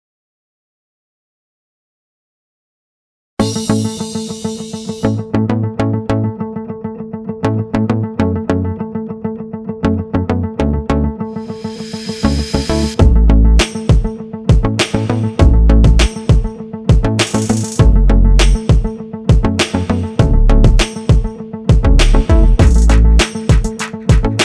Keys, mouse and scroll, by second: 0.4 s, 4.8 KP_1, 5.5 click, 6.3 click, 6.6 middle click, 7.5 click, 8.1-8.9 scroll down 4, 8.3 middle click, 9.5 shift+middle click, 9.8 scroll up 4, 10.1 right click, 11.6 click, 13.2 i, 14.7 click, 18.8 r, 22.9 i, 23.8 click.